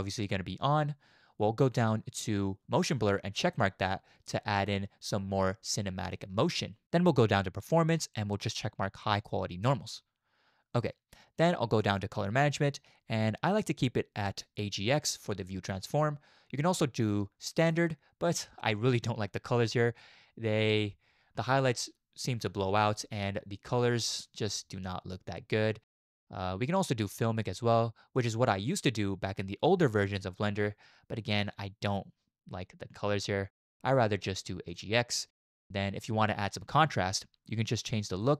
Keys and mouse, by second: 3.6 click, 7.6 click, 9.8 click, 11.8 click, 16.7 click, 26.7-28.5 drag, 33.9-35.0 drag, 38.2-38.3 drag.